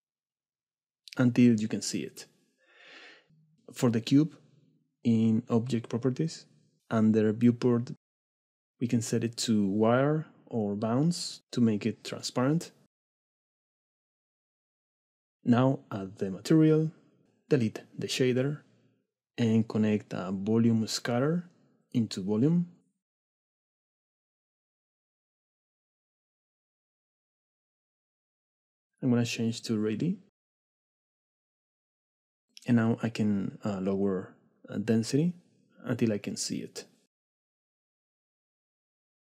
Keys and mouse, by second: 1.5 middle click, 2.2 middle click, 3.6 shift+middle click, 7.9 click, 10.7-14.1 drag, 16.7 drag, 17.3 x, 18.0 shift+a, 22.6-23.1 drag, 26.1 click, 26.9 middle click, 27.9 shift+middle click, 29.6-32.4 drag, 33.2-34.5 drag, 33.7 KP_0, 35.6 click, 36.1 right click, 36.6 click, 37.9 shift+click, 38.0 middle click, 38.2 middle click, 38.5 middle click.